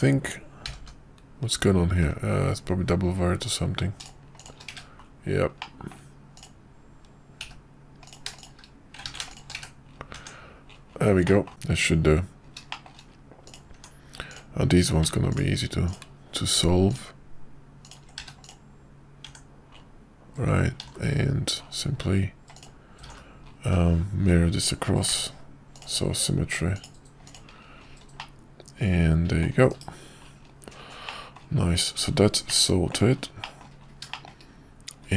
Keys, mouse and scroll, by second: 0.7 g, 4.4 shift+click, 4.7 1, 5.6 middle click, 7.5 g, 9.1 ctrl+z, 9.3 shift+click, 9.7 1, 10.1 Tab, 11.2 middle click, 12.7 shift+middle click, 13.7 Tab, 14.3 click, 18.2 q, 19.2 Tab, 20.8 alt+x, 22.5 click, 27.0 click, 27.2 click, 28.1-29.4 middle drag, 29.7 /, 31.0-31.4 middle drag, 32.5-33.0 middle drag, 33.4 middle click, 34.1 shift+middle click.